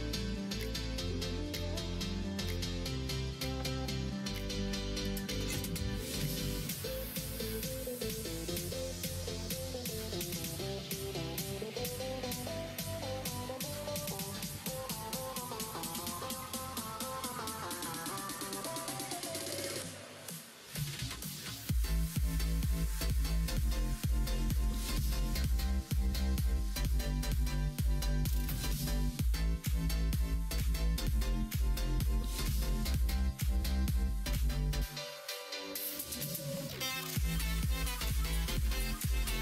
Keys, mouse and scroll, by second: 0.3 s, 2.4 s, 3.6 ctrl+z, 4.4 s, 7.8 2, 8.6 alt+click, 9.4 ctrl+b, 16.9 s, 19.7 alt+z, 20.3-23.2 middle drag, 23.2 scroll down 1, 23.4 Tab, 23.9 middle click, 24.9 Tab, 25.4-27.1 middle drag, 28.5 s, 29.8 ctrl+z, 30.1 middle click, 31.8-32.9 middle drag, 34.6 ctrl+z, 34.9 ctrl+z, 35.1 ctrl+z, 35.3 ctrl+z, 35.5 ctrl+z, 35.7 ctrl+z, 36.0 ctrl+z, 36.4 ctrl+z, 36.8 ctrl+z, 38.3 middle click.